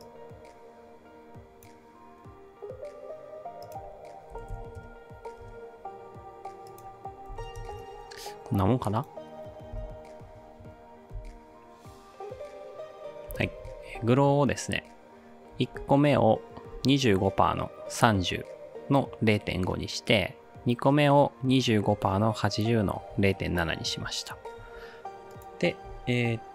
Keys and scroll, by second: 4.0-5.0 typing, 5.4 Return, 7.0-7.9 typing, 9.8 space, 11.2 space, 13.3 space.